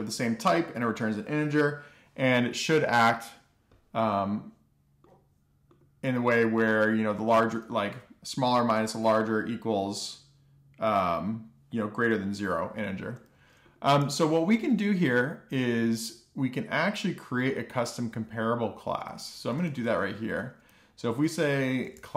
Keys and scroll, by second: 14.7 alt+shift+f, 15.3 super+s, 20.1 Return, 20.3 Return, 21.7-22.1 typing.